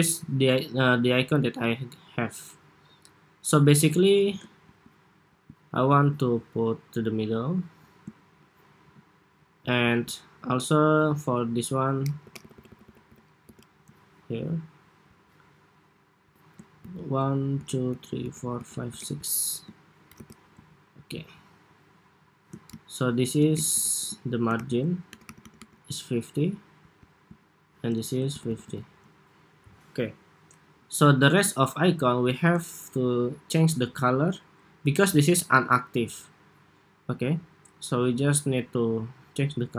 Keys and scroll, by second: 11.9 alt+Left, 12.2 alt+Left, 12.4 alt+Left, 12.5 alt+Left, 12.8 alt+Left, 13.2 alt+Left, 19.9 alt+Left, 24.2 alt+shift+Left, 25.0 alt+Right, 25.1 alt+Right, 25.4 alt+Right, 28.0 alt+Left, 28.5 alt+Left.